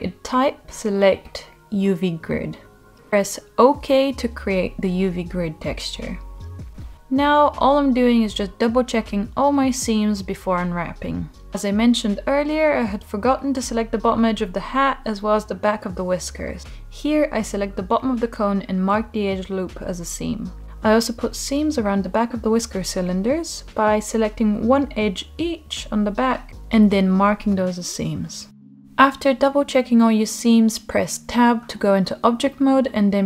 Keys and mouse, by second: 7.9-9.4 drag, 9.6 shift+h, 10.4-10.8 middle drag, 11.4 Tab, 13.7 click, 15.9-17.0 right drag, 17.5-19.3 middle drag, 20.2 Tab, 21.9 shift+click, 23.5 shift+click, 24.4 shift+click, 26.5 right click, 28.1 middle click, 29.9-30.6 middle drag, 32.7 a.